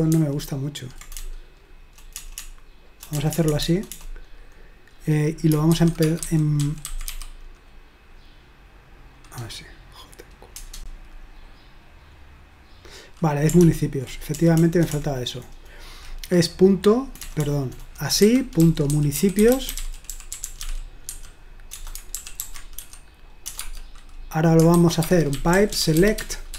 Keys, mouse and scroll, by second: 0.1 ctrl+p, 1.2-3.9 typing, 5.5-7.6 typing, 10.6 Return, 13.6 ctrl+p, 14.3 BackSpace, 14.6 BackSpace, 14.7 BackSpace, 14.9 BackSpace, 17.2-23.6 typing, 24.7-26.5 typing.